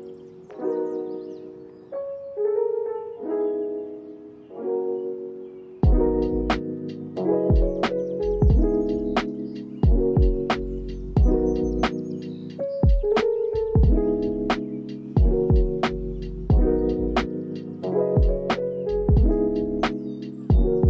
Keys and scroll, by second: 0.8 ctrl+s, 2.4 space, 3.7 ctrl+k, 12.9 ctrl+k, 19.9 ctrl+s, 20.5 space.